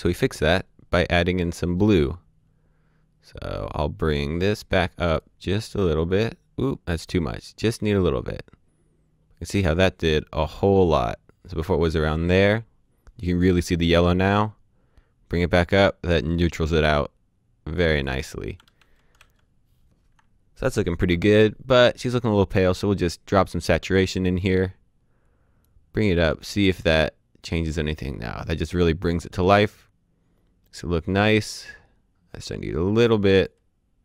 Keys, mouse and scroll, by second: 5.2 click, 18.7 d, 19.1 d, 25.8 click.